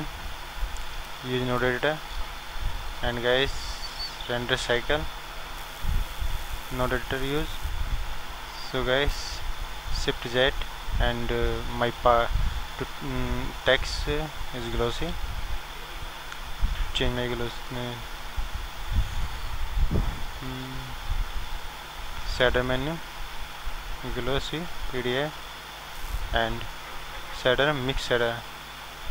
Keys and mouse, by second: 9.3-10.3 middle drag, 10.3 shift+z.